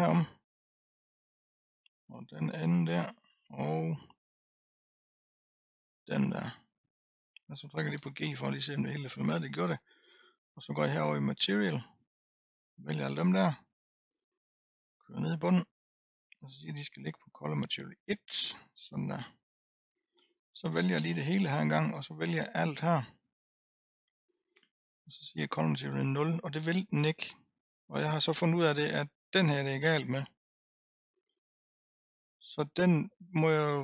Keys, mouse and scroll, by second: 0.5 l, 1.0-2.7 middle drag, 2.7 l, 3.1-5.9 middle drag, 5.9 l, 6.5-7.9 middle drag, 7.9 g, 11.5 click, 12.4 drag, 14.8-17.8 drag, 18.1-20.0 drag, 21.0 a, 22.4 click, 25.5-26.9 drag, 29.0 click.